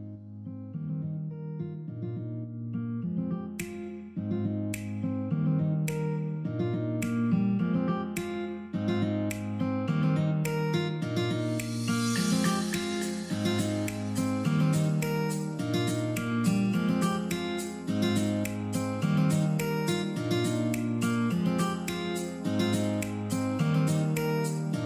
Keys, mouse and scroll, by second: 10.6 click, 16.1 click, 22.7 click.